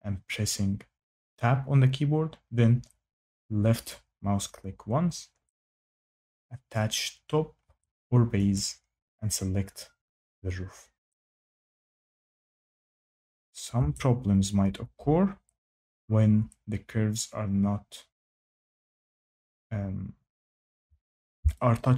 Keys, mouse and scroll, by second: 3.8 click, 6.9 click, 8.5 click, 12.9 click, 20.6 shift+middle click.